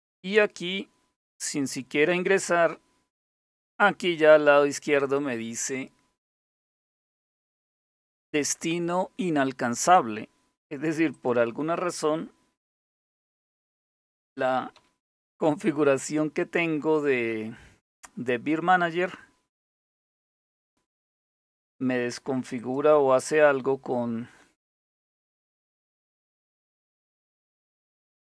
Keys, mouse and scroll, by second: 10.7 click, 12.2-15.5 typing, 21.1 click, 21.8 Return, 24.0 click.